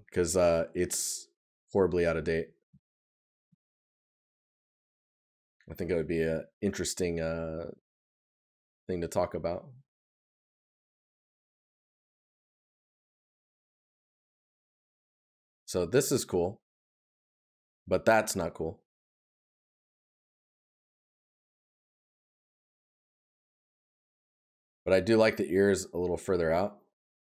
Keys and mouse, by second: 2.3 right click, 13.8 right click, 18.4 right click, 23.6 right click.